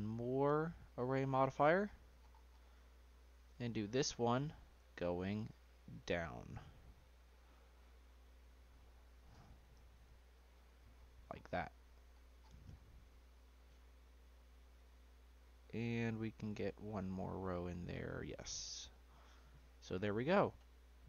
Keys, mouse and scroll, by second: 1.1 click, 1.4-2.2 scroll down 11, 2.2 scroll up 1, 2.4-3.6 scroll down 6, 3.6-5.2 drag, 5.5-7.4 drag, 9.1-10.6 drag, 10.9-12.1 scroll up 5, 12.1-12.9 scroll down 5, 12.9 scroll down 4, 13.2 click, 14.1-14.8 scroll down 1, 14.8-17.1 middle drag, 17.1-18.4 drag, 18.4-20.3 middle drag, 20.3 click, 20.7-21.0 middle drag.